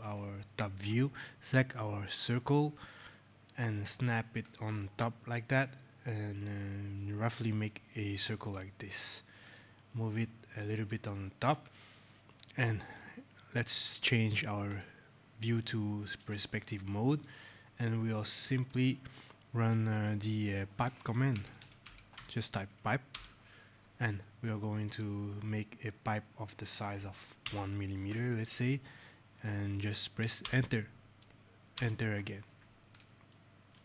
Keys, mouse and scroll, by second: 2.2 click, 4.3 click, 8.3 click, 11.2 click, 14.6 click, 15.5 right click, 16.5 shift+right click, 17.3 scroll, 18.6 click, 20.7 scroll, 21.0-22.6 typing, 23.0 Return, 27.3 KP_1, 30.3 shift+Return, 31.6 Return, 32.8 click, 33.2 right click, 33.7 right click.